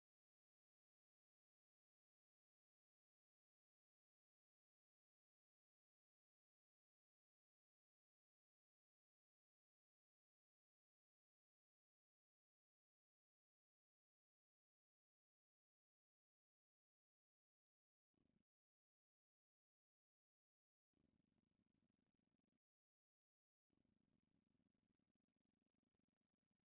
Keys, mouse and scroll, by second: 0.4-1.9 drag, 1.9-6.5 middle drag, 7.0-8.3 drag, 11.3 click, 17.0 click, 18.4-19.7 drag, 20.5 click, 22.4 click, 23.6 click, 24.9 Tab, 25.5 middle click, 26.2 shift+click.